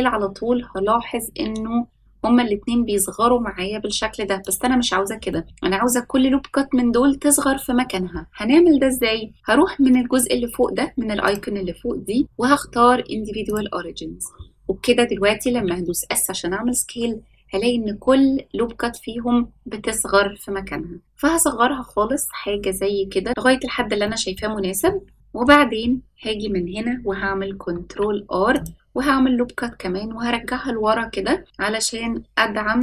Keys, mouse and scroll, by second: 5.2 middle click, 11.2-15.5 drag, 15.5 s, 23.3 middle click, 24.0 middle click, 24.8 shift+middle click, 27.6 ctrl+r.